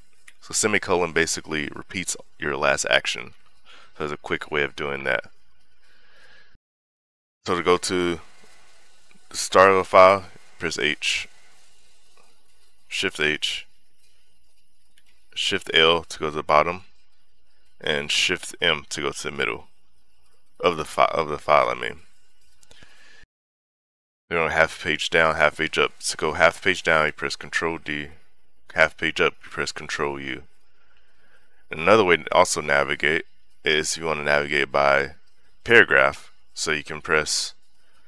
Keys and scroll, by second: 3.7 ., 4.8 Escape, 6.2-7.0 typing, 10.4 shift+h, 15.3 shift+l, 18.8 shift+m, 23.2 u, 27.4 ctrl+d, 30.1 ctrl+u, 31.2 ctrl+u.